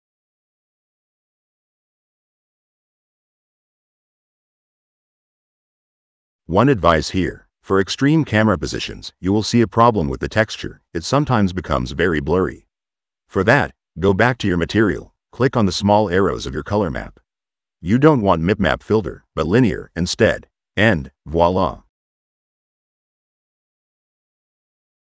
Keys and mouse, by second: 1.0 click, 3.5 click, 4.5 middle click, 5.4-6.9 drag, 10.1 click, 12.3 middle click, 12.7 click, 13.9 click, 15.4 click, 16.5 click, 18.0 click, 19.1-20.4 drag, 20.8-24.6 drag.